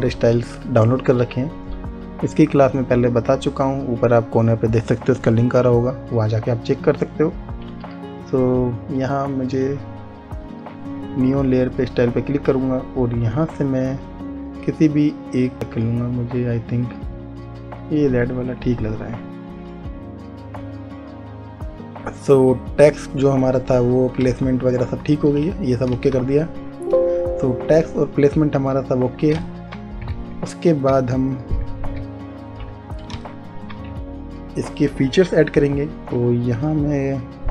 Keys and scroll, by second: 26.0 space, 32.8 ctrl+z, 34.0 space.